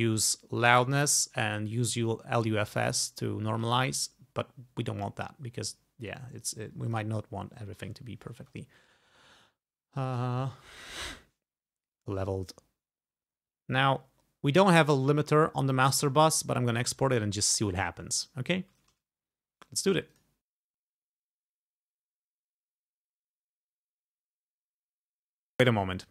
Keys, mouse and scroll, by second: 0.8 click, 2.9 click, 3.6 click, 7.0 click, 15.9 click, 20.2 click, 22.2 click, 25.5 click.